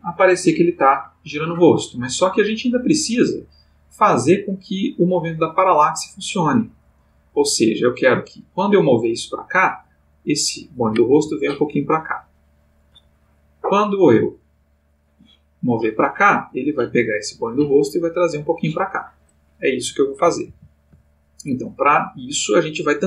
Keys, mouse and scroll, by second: 10.0 click, 11.1 g, 12.4 click, 14.2 click, 15.4 click, 17.0 click, 17.6 g, 19.1 click, 20.5 alt+g, 21.9 click.